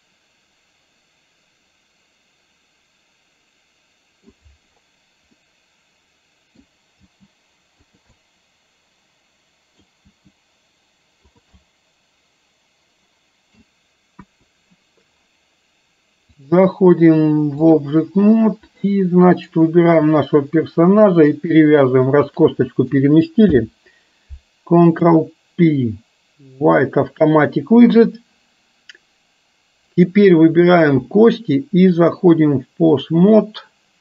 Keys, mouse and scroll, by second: 5.5-6.6 middle drag, 7.0 g, 8.3-10.0 middle drag, 11.6-13.6 middle drag, 14.3 KP_1, 16.5-17.9 drag, 18.9 middle click, 20.3 click, 22.3 shift+click, 23.5 ctrl+p, 31.0 click, 32.1-33.5 drag.